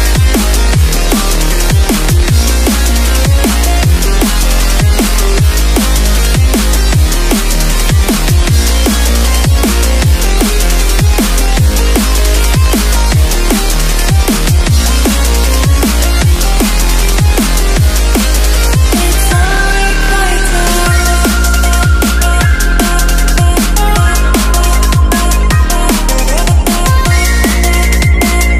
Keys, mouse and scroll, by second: 6.1-8.1 typing, 7.0 click, 8.2 click, 8.4 Left, 8.8 Up, 8.9 Right, 9.4 scroll down 1, 10.2 click, 11.1 click, 12.1 t, 12.2 click, 14.6 Return, 14.8 Up, 14.9 click, 15.9 alt+Tab, 16.1 alt+click, 16.6 Tab, 17.0 ctrl+v, 17.8 click, 21.3 scroll down 1, 21.6 alt+scroll up 2, 22.0 click, 22.9 ctrl+a, 23.2 click, 24.9 Delete, 25.3 click, 25.6 alt+Tab, 26.0 click, 26.4 click, 26.8 v, 27.1 Left, 27.5 click, 27.5 Left, 28.3 click.